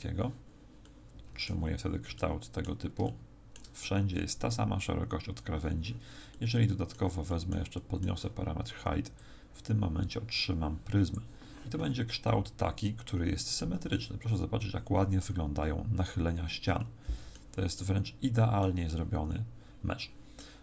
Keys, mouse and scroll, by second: 0.8 middle click, 1.7-2.1 scroll down 3, 2.1 middle click, 3.0 shift+middle click, 6.3 middle click, 7.2 middle click, 7.7 middle click, 9.1 click, 12.2 middle click, 16.7 middle click, 17.7 middle click, 18.9 middle click.